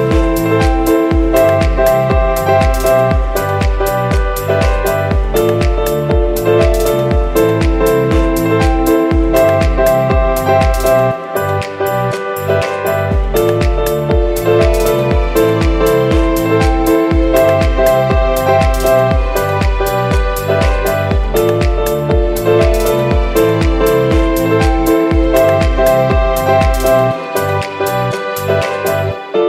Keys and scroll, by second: 2.7 z, 4.4 super+g, 4.9 z, 5.2 v, 11.0 v, 25.0 z, 26.8 v, 28.3 super+g, 29.0 super+y.